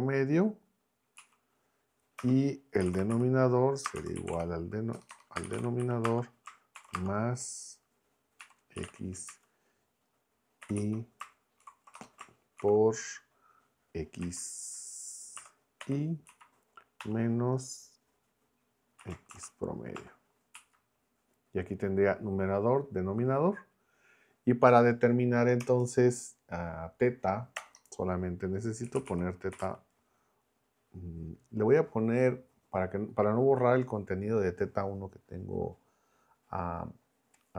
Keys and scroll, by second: 2.2 Return, 2.8-6.9 typing, 8.2-9.3 typing, 10.6 i, 10.8 Right, 11.6 shift+0, 11.9 BackSpace, 12.6 shift+9, 14.2 x, 15.4 [, 15.8 ], 16.3 Right, 17.0 -, 19.0 x, 19.3 shift+a, 20.0 Tab, 20.6 Right, 25.6 Return, 27.6 BackSpace, 28.6-30.1 typing.